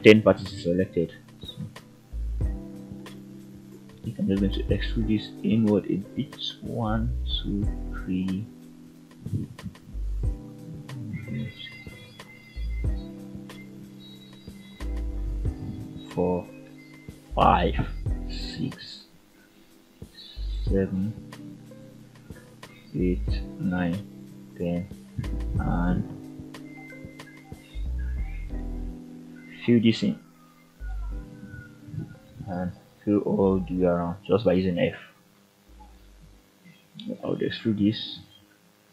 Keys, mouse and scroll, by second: 0.0-0.6 scroll down 2, 0.6 middle click, 1.3-2.0 scroll up 1, 2.0 click, 3.4 ctrl+right click, 6.4 middle click, 7.0 scroll down 1, 7.4-8.6 shift+middle drag, 9.0 middle click, 10.0 middle click, 10.7 shift+middle click, 11.3-12.4 middle drag, 12.6-13.0 scroll up 2, 14.0-14.3 ctrl+right drag, 17.1 shift+middle click, 18.7-19.5 ctrl+right drag, 23.9 shift+click, 25.2 ctrl+z, 25.8 shift+click, 26.6 shift+click, 27.8 shift+click, 28.4 f, 28.9 click, 29.7 shift+click, 30.4-31.6 f, 32.0 f, 33.9 click, 35.0-36.3 ctrl+right drag, 36.3 ctrl+click, 37.1 f, 37.8 click.